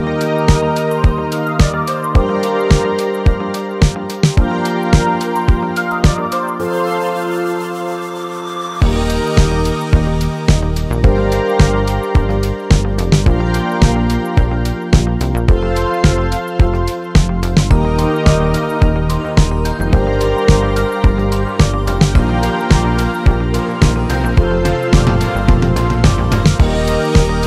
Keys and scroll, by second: 4.3 typing.